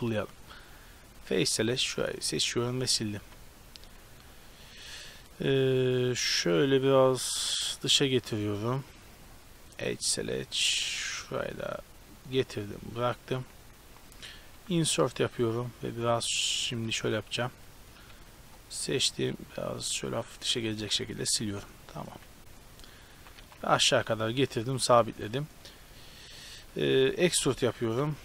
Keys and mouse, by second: 1.3-2.6 right drag, 1.9 x, 2.5 z, 3.3 z, 3.9 a, 12.5-13.9 right drag, 13.1 a, 13.3 a, 14.5 i, 16.5-17.6 right drag, 18.2 b, 20.9 x, 21.4 z, 22.2 a, 23.3 g, 26.7-28.2 typing.